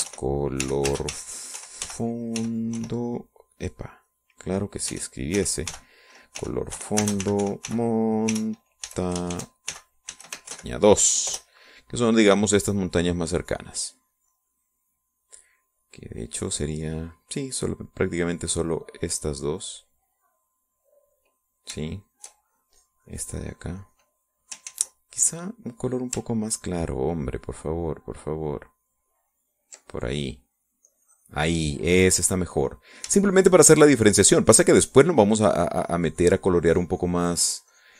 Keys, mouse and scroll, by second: 0.3-3.9 typing, 4.8 click, 5.2 click, 5.8-12.1 typing, 12.4 Return, 14.6 click, 15.5 middle click, 22.0 middle click, 23.0-25.4 shift+drag, 25.8 ctrl+z, 26.1 ctrl+click, 26.9-28.7 scroll up 1, 29.8-31.4 ctrl+drag, 32.0 click, 32.8-33.8 middle drag, 34.3-37.9 shift+drag.